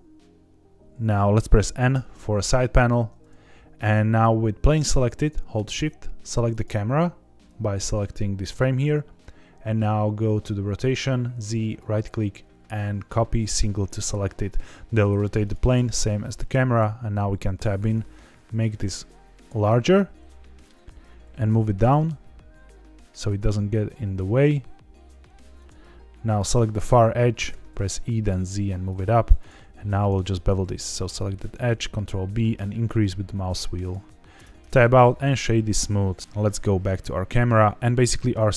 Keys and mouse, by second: 1.9 n, 11.7-13.9 right drag, 15.4 click, 16.4 Tab, 16.7 s, 19.3 click, 20.2 middle click, 21.0 g, 21.2 z, 23.1 click, 23.3 s, 25.5 click, 26.7 click, 26.7 2, 27.4 e, 27.7 z, 28.8 click, 29.3 click, 29.8 ctrl+b, 33.8 click, 34.3 Tab, 34.8 right click, 36.2 KP_0, 37.2 shift+middle click.